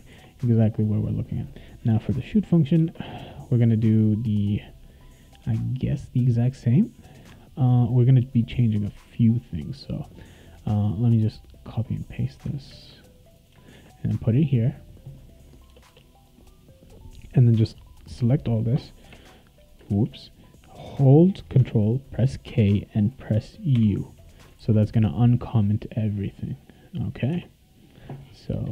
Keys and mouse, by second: 0.1 ctrl+s, 1.8 click, 2.8 Return, 10.0-12.0 drag, 12.7 ctrl+c, 13.4 click, 13.7 ctrl+v, 15.0 click, 15.4 click, 15.7 BackSpace, 15.9 BackSpace, 17.0-18.3 drag, 19.9 ctrl+z, 22.5 ctrl+k, 23.7 ctrl+u, 24.6 ctrl+s, 26.1 click, 27.3 Tab, 28.5 BackSpace.